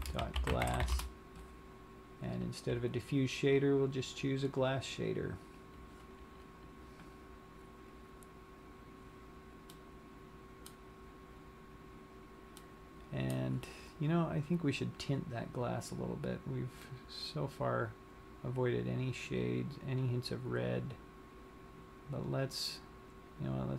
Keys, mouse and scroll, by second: 0.9 s, 2.5 click, 8.4 scroll down 1, 10.2 middle click, 12.7 middle click, 14.9 click.